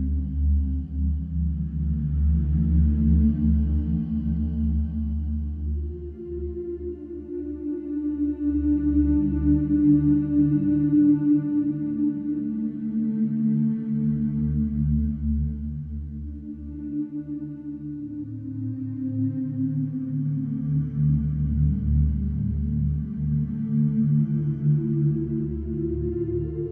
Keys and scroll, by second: 5.8 F1, 10.3 ctrl+d, 10.4 Escape, 11.1 ctrl+d, 11.2 Escape, 13.0 ctrl+d, 13.1 Escape, 17.6 Return, 20.0 ctrl+d, 20.1 Escape.